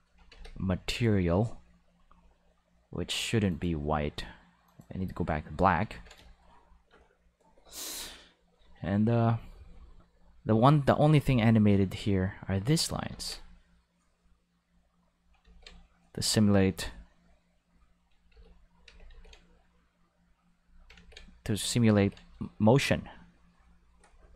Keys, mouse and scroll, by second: 0.3 ctrl+s, 0.9 click, 3.5 click, 4.6 click, 5.9 ctrl+s, 11.5 click, 13.1 ctrl+z, 13.7 click, 15.4 ctrl+z, 15.9 click, 16.8 click, 17.6 click, 18.3 ctrl+z, 18.8 ctrl+z, 19.1 ctrl+z, 20.1 click, 20.9 ctrl+z, 21.4 click, 21.9 ctrl+z, 22.4-24.3 drag.